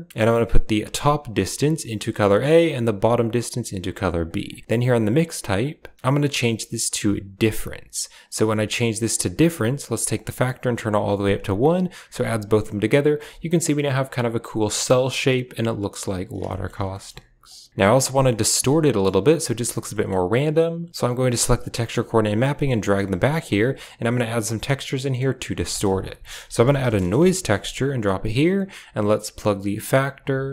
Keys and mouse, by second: 1.3-2.1 drag, 3.0-3.7 drag, 4.1 click, 4.7-7.4 drag, 8.6 click, 10.0-12.5 drag, 16.4 shift+middle drag, 16.9 shift+middle click, 18.0 middle click, 18.7 middle click, 19.8 middle click, 20.0 click, 21.3 drag, 22.3 g, 23.0 middle click, 24.9 click, 25.5 shift+a, 28.4 drag, 29.3-30.5 drag.